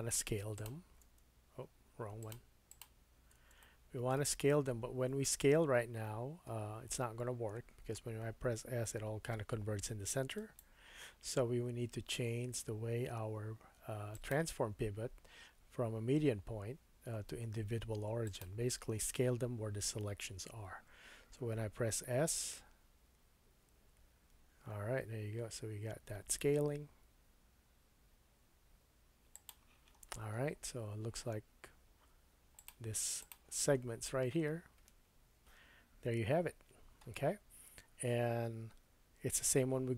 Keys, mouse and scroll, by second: 0.5 alt+shift+click, 2.2 alt+shift+click, 2.7-10.5 alt+shift+drag, 2.7 alt+shift+middle click, 2.7 alt+shift+right click, 3.6 shift+middle click, 5.0-5.6 scroll down 1, 5.6 scroll up 1, 6.2-6.6 scroll down 1, 8.4 s, 10.5-14.1 middle drag, 14.1-29.5 drag, 22.5 s, 29.5-32.6 middle drag, 30.0-32.3 scroll up 4, 32.3 scroll up 1, 32.6 click, 32.6 middle click, 33.2-39.9 drag, 33.8 scroll down 1, 34.4-36.2 scroll down 3, 38.9 Tab.